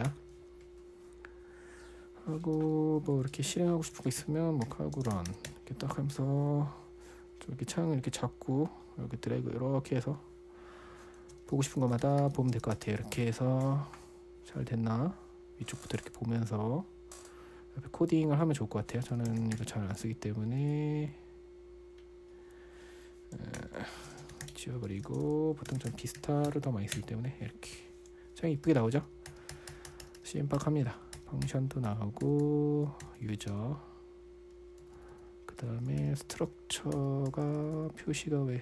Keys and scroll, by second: 0.5 ⟲, 3.3-6.2 typing, 9.1-9.8 typing, 11.7-13.9 typing, 19.3-21.0 typing, 24.0 super+], 24.2-27.1 typing, 27.3 Return, 29.1-30.1 typing, 32.3-33.9 typing, 35.2 typing, 36.4 ctrl+l, 36.8-38.6 typing.